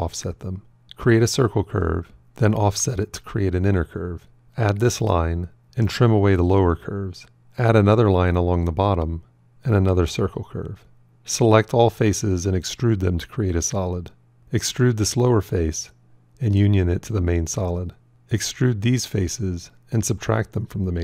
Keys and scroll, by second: 1.0 shift+c, 2.7 o.